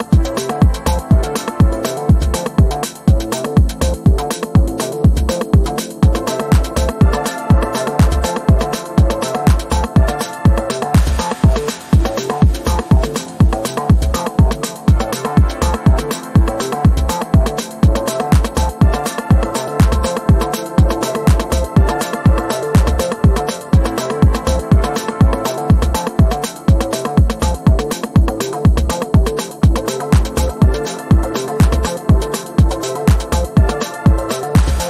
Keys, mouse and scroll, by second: 2.0-2.9 drag, 4.0 ctrl+g, 4.4 click, 5.4 Delete, 5.8 click, 6.2 click, 8.0-9.3 typing, 11.6 ctrl+z, 12.2 click, 12.7-13.6 typing, 14.5 click, 17.8-18.9 typing, 20.5 click, 34.7 shift+click.